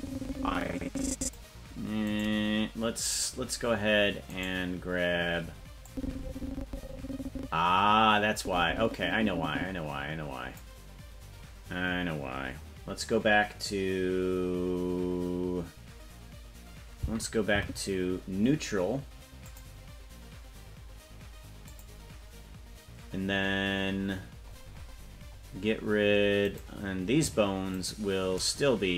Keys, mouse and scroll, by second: 2.0 right click, 4.3 right click, 5.8-10.6 drag, 17.6 Right, 19.5 click, 21.6 click, 24.2-25.8 scroll up 20, 26.7 right click, 28.0 shift+right click.